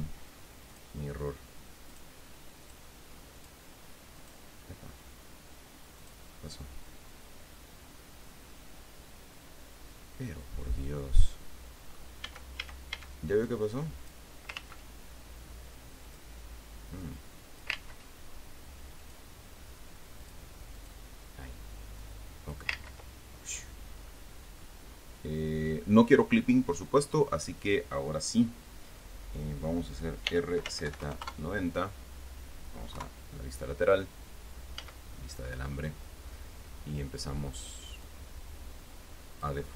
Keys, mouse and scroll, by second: 1.0 click, 2.2 click, 3.0 click, 3.7 click, 4.5 click, 6.3 click, 8.8-12.5 middle drag, 12.6 a, 13.8 click, 14.9 ctrl+z, 16.4 click, 17.3 click, 18.1 ctrl+z, 19.3 click, 20.5 click, 21.1 click, 22.3 click, 23.0 ctrl+z, 23.7 ctrl+scroll down 3, 30.6 r, 31.0 z, 31.2 KP_9, 31.3 KP_0, 31.5 KP_Enter, 33.3 KP_3, 35.1 z, 35.8-36.2 scroll up 2, 38.3-39.7 drag.